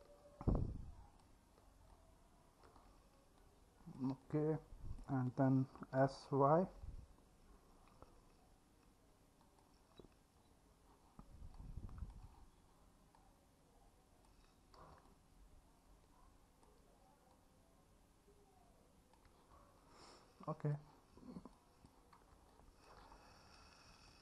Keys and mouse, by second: 0.0-0.9 alt+middle drag, 3.7 click, 3.9 middle click, 4.2-5.0 alt+middle drag, 6.0 s, 6.8 y, 11.6 click, 15.1-16.7 alt+middle drag, 17.8 click, 19.6-20.8 alt+middle drag, 21.6 click, 22.5-22.9 alt+middle drag.